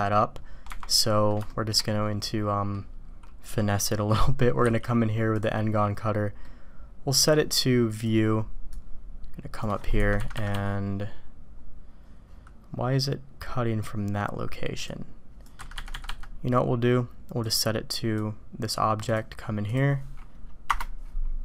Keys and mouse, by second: 1.0 drag, 1.5 shift+drag, 1.9-2.7 drag, 6.4-7.2 drag, 7.9 click, 8.7-9.6 drag, 14.9-15.5 drag, 17.3 click, 18.1-18.7 drag.